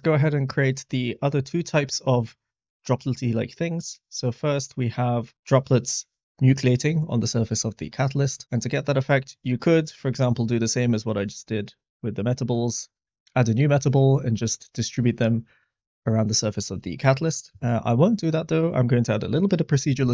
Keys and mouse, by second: 8.3 middle click, 12.3 middle click, 14.0 middle click, 17.7-18.1 middle drag.